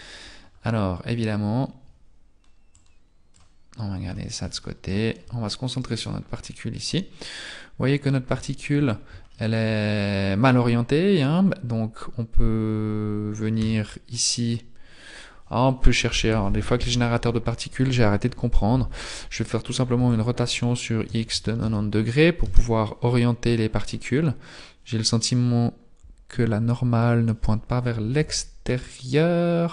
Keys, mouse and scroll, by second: 1.4 scroll down 1, 2.7 click, 3.7-4.5 scroll up 2, 4.1 shift+middle click, 5.7 shift+middle click, 5.7 right click, 5.7 scroll down 4, 7.5-8.0 scroll up 9, 8.4 shift+middle click, 8.9 scroll up 1, 9.3 shift+middle click, 13.6 Tab, 19.9 r, 22.4 r, 24.7-27.4 scroll up 1, 27.4-27.9 scroll up 2, 28.3 n.